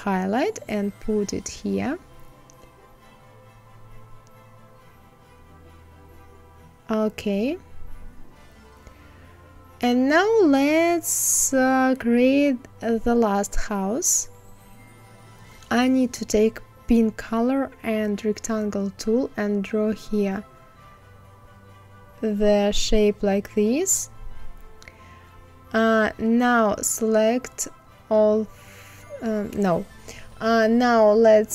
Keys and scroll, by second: 31.4 ctrl+c.